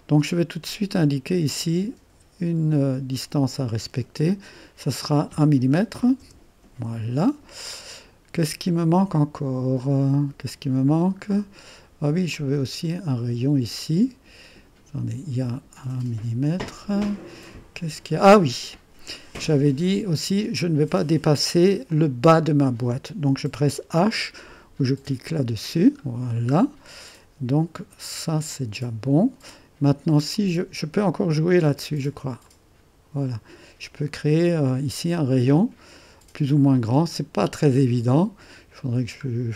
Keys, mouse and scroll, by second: 0.0-1.9 drag, 3.3 click, 4.8-5.9 drag, 5.7-6.4 typing, 7.6-8.7 scroll down 1, 9.7-17.9 drag, 17.1-17.9 scroll up 1, 19.2 typing, 19.6 click, 21.8-23.5 drag, 25.2 h, 26.0-27.0 scroll down 1, 28.5 click, 30.3-31.7 drag, 32.5-37.4 drag, 37.7-38.8 scroll down 1, 38.8-39.3 scroll down 1, 39.3-39.5 scroll up 1.